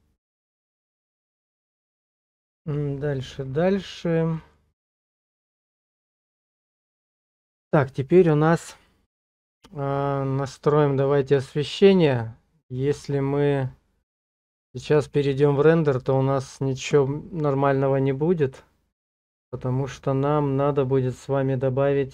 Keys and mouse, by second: 3.3 click, 4.4 middle click, 4.8 Tab, 10.1-12.1 middle drag, 14.7 click, 19.5 click.